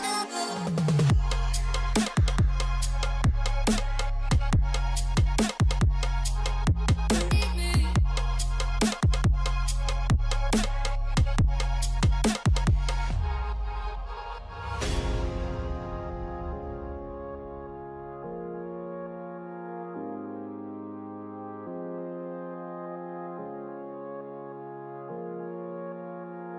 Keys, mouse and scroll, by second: 1.5 ], 2.1 double click, 4.2 click, 4.8 [, 4.9 double click, 11.8 double click, 14.9 ], 15.4 double click, 16.5 scroll down 1, 20.0-22.9 scroll down 1, 22.9 double click, 24.9 alt+scroll down 1.